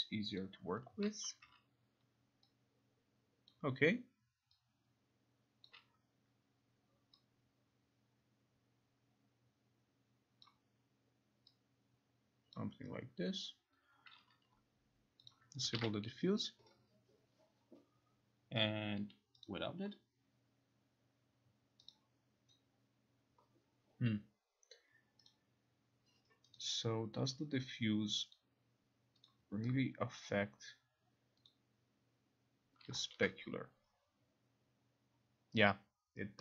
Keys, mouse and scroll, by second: 1.1 click, 3.6 click, 5.7 click, 10.5 click, 12.6 click, 13.6 click, 15.4 click, 15.9 ctrl+r, 19.6 click, 22.0 click, 25.4 click, 26.7 click, 28.5 click, 29.3 click, 30.3 click, 31.6 click, 33.1 click.